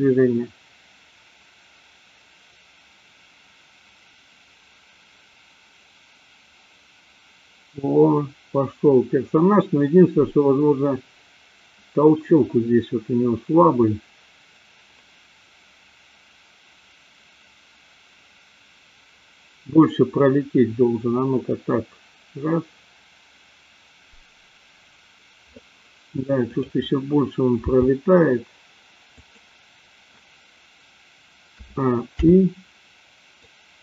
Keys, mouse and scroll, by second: 26.4 click, 27.6 g, 31.7 a, 32.2 i, 33.7-33.8 drag.